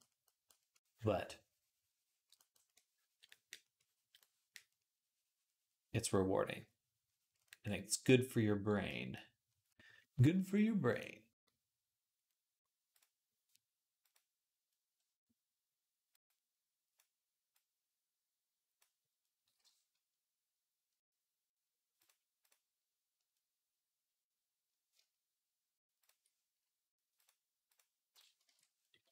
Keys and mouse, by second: 0.1-3.3 middle drag, 0.1-3.3 right drag, 4.1 click, 4.1 middle click, 4.1 right click, 4.4-15.0 drag, 4.4-15.0 middle drag, 4.4-15.0 right drag, 24.8-25.9 shift+drag, 24.8-25.9 shift+middle drag, 24.8-29.1 shift+right drag, 26.0-28.2 middle drag, 27.0 click, 28.3 ctrl+Tab, 28.4-29.1 middle drag, 28.9 r.